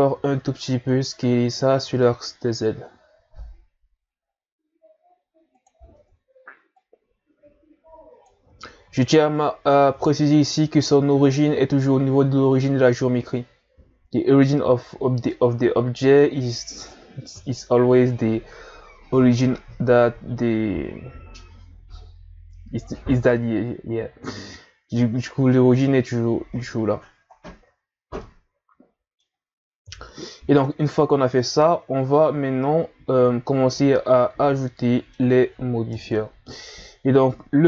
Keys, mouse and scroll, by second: 0.2 s, 5.9 Tab, 6.8-9.2 drag, 9.2-10.2 scroll up 3, 10.2-11.5 scroll down 2, 11.5-13.2 scroll down 1, 15.3-17.3 middle drag, 17.3 KP_1, 20.1 scroll up 2, 24.8-25.4 scroll down 2, 27.3 scroll down 1, 28.0 scroll down 2, 28.2-29.8 middle drag, 29.8 KP_1, 30.8 scroll up 1, 32.3-32.9 scroll down 1, 33.6 scroll down 3, 33.8-35.9 middle drag, 35.9 KP_1, 36.8 scroll up 3.